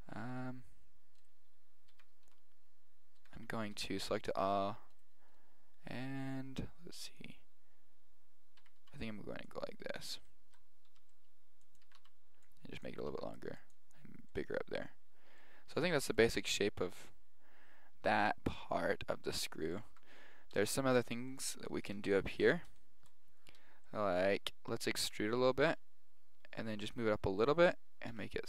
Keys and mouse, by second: 1.2 right click, 2.0-4.0 typing, 8.6 a, 8.8 b, 9.9-12.2 middle drag, 10.9 g, 11.9 a, 12.0 b, 13.1 s, 14.4-15.5 middle drag, 15.9 Tab, 18.0 middle click, 19.9 Tab, 21.3-23.2 middle drag, 23.5-25.7 middle drag, 25.1 e, 28.2 s.